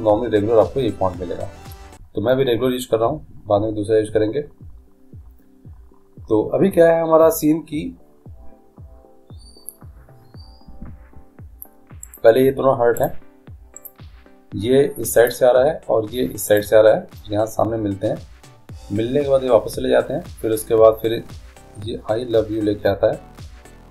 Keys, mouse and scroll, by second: 12.3-15.8 right drag, 15.3-17.2 drag, 16.7-18.5 right drag.